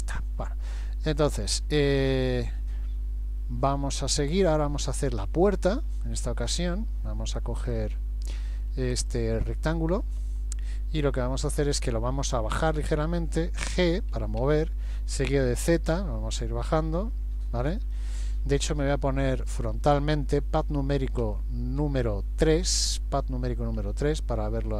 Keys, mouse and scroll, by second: 4.5-5.1 scroll up 2, 5.3 shift+middle click, 5.8-6.2 shift+scroll down 1, 6.3 middle click, 7.7 click, 8.4 middle click, 9.0 click, 14.4 g, 21.2 KP_1, 21.8 KP_3, 23.9 shift+middle click.